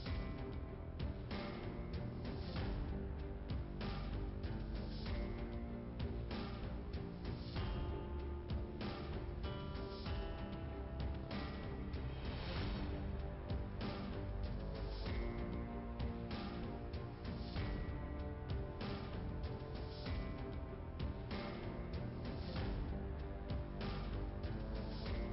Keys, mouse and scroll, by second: 0.1 click, 1.6 click, 3.3 click, 3.7 click, 3.8 click, 7.3 scroll up 1, 11.7 click, 12.8 click, 15.6 click, 16.9 click, 19.9 5, 21.5 Return, 23.5 click, 24.9 click.